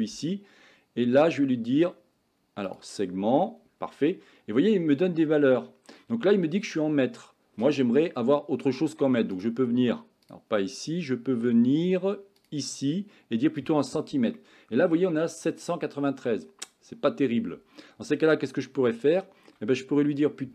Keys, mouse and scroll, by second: 2.7 click, 4.1-5.6 middle drag, 9.5-10.3 drag, 12.5-13.8 drag, 14.4 middle click, 19.0 shift+middle click.